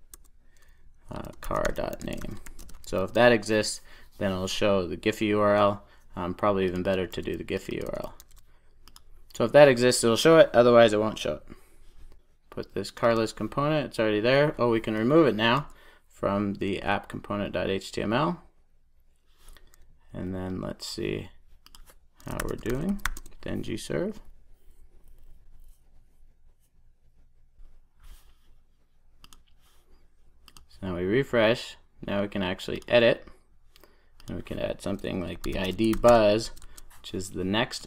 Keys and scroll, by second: 2.9 super+s, 7.4 super+c, 7.8 super+v, 8.7 super+s, 12.5 super+s, 16.6 super+s.